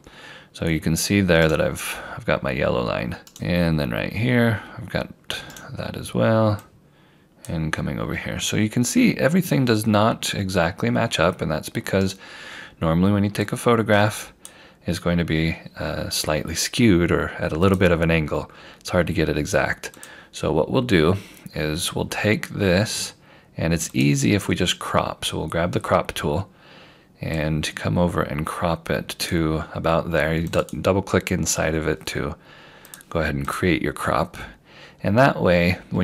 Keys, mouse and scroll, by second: 1.5 right click, 6.7 click, 12.1 right click, 13.5 click, 17.7 click, 21.2 scroll down 1, 24.0 click, 27.4 click, 35.0 scroll up 1.